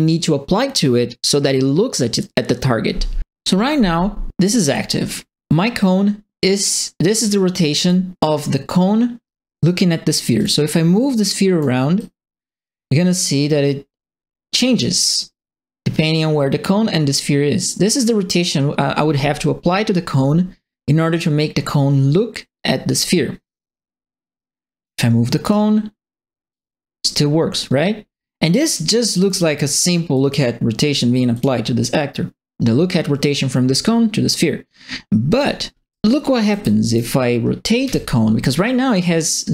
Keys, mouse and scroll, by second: 4.6 click, 7.8 click, 10.3 click, 11.3 click, 11.9-24.8 drag, 25.4 click, 26.5-28.7 drag, 29.2 click, 30.1 middle click, 31.3 middle click, 35.3 middle click, 35.9-36.9 right drag, 36.5 e, 37.8 e.